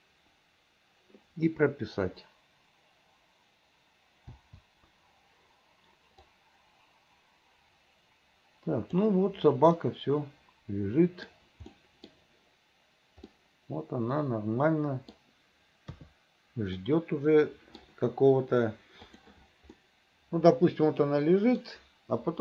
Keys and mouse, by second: 6.4-9.2 drag, 9.9-11.4 middle drag, 11.9 middle click, 13.4-15.2 middle drag, 16.0 KP_3, 16.9-17.9 middle drag, 19.2 click, 19.9-21.7 middle drag.